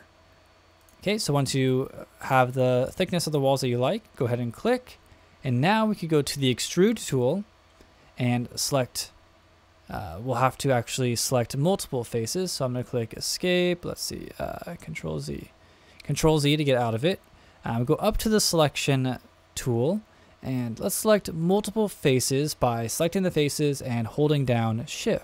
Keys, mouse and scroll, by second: 0.8 click, 7.0 click, 8.6 click, 10.9 Escape, 12.6 Escape, 13.1 Escape, 14.9 super+z, 18.2 click, 20.4 click, 21.4 shift+click, 22.8 shift+click, 24.4 shift+click.